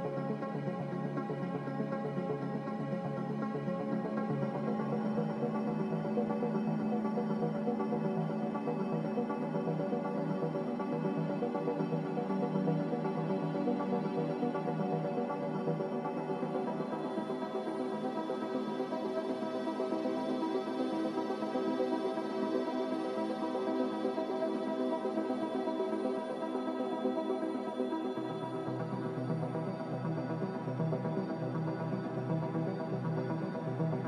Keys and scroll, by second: 0.0-2.1 typing, 19.1-20.9 typing, 24.2 a.